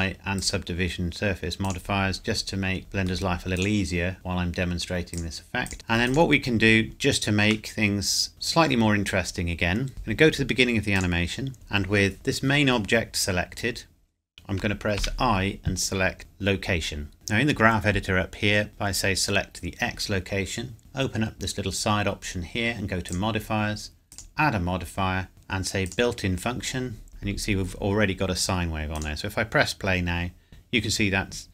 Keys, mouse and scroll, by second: 2.8 middle click, 3.6 click, 6.9 scroll down 1, 7.9 middle click, 8.3 click, 10.9 click, 17.1 click, 20.8 click, 23.1 click, 25.9 click, 27.1-28.0 scroll up 1, 28.9 click.